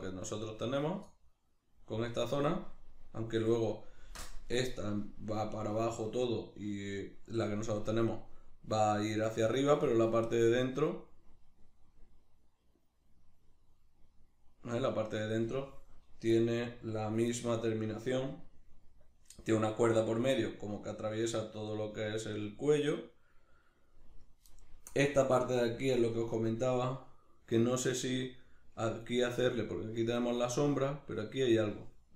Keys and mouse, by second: 10.6 middle click, 29.5 middle click.